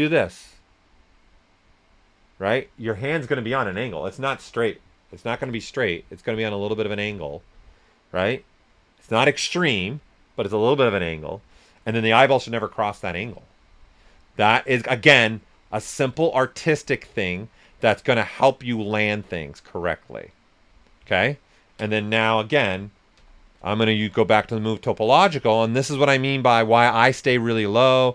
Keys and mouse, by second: 21.2 ctrl+click, 23.1-23.5 typing, 25.2 click, 25.7 s, 25.8 click, 26.9 ctrl+right click, 27.4 s.